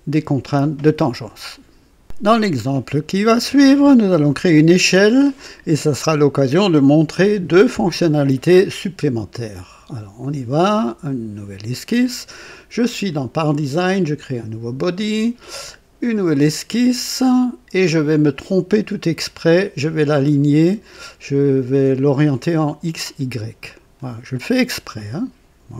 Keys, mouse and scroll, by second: 10.1 click, 14.1 click, 18.0 click, 22.0 click, 23.6 click, 24.9-25.7 right drag.